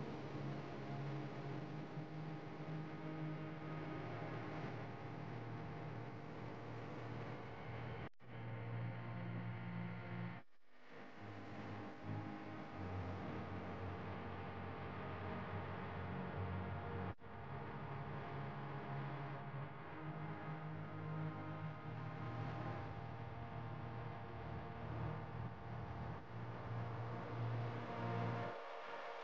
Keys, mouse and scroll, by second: 0.5 click, 0.9-2.7 middle drag, 2.7 click, 4.0-5.1 middle drag, 5.1 click, 6.0 click, 7.6 click, 7.9 click, 8.2 s, 9.7 Tab, 12.7-14.6 drag, 15.7 ctrl+b, 19.9 Tab, 20.4-22.2 middle drag, 22.2 Tab, 23.0 alt+click, 24.0 ctrl+b, 27.2 Tab, 27.6 click, 28.1 click, 28.5-29.2 right drag.